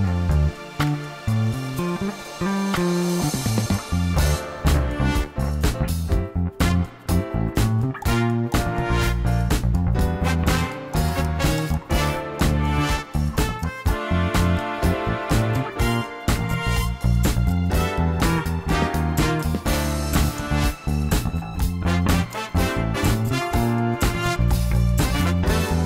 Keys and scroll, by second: 2.8 3, 4.1 i, 7.9 2, 10.3 g, 10.7 z, 16.0 3, 20.8 i.